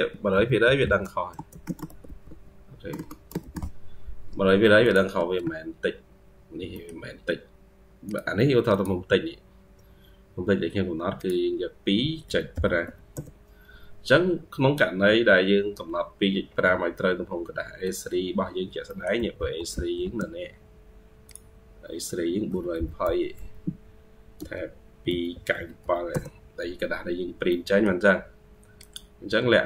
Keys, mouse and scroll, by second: 0.0-3.8 typing, 5.0 Escape, 5.3 Escape, 5.4-6.6 scroll down 4, 6.6 middle click, 14.2-14.9 scroll down 2, 14.9-17.7 scroll up 16, 17.7 Escape, 17.9 Escape, 18.1-18.7 scroll down 6, 18.7 middle click, 19.0 typing, 20.2-20.8 scroll up 2, 20.6-23.2 typing, 24.2 Tab, 24.5-26.2 typing, 26.9-27.3 scroll down 3, 27.3 middle click, 28.1-29.1 scroll up 1.